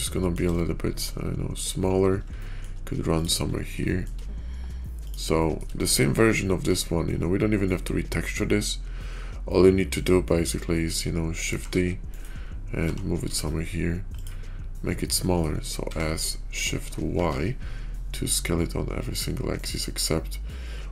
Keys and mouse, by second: 0.4-1.4 shift+drag, 1.4 shift+middle click, 2.3 shift+middle click, 3.7 shift+middle drag, 5.2 shift+middle click, 6.1-6.5 shift+middle drag, 9.4-10.8 middle drag, 11.4 shift+d, 12.7 g, 15.0-15.3 drag, 15.8 s.